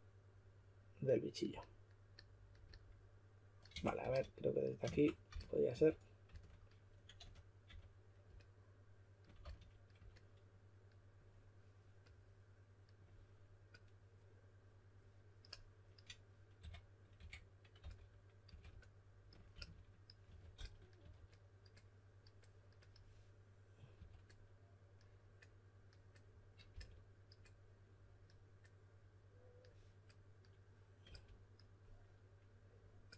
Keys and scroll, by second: 3.7-7.6 typing, 9.4 s, 16.6-18.4 typing, 19.5-21.5 typing, 23.9 typing, 26.7 typing, 31.0 typing.